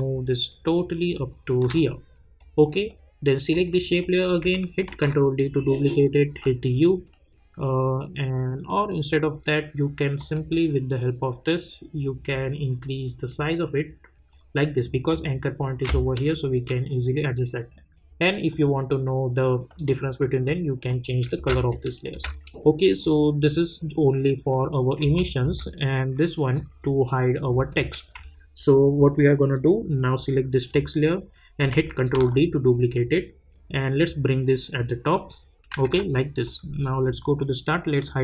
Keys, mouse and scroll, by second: 2.4 click, 4.9 ctrl+d, 6.3 u, 10.1-16.7 drag, 18.5 click, 21.4 space, 23.0 click, 25.0 space, 26.5 click, 32.1 ctrl+d, 34.0-35.7 drag, 35.7 =, 35.9 =, 36.4-38.0 drag.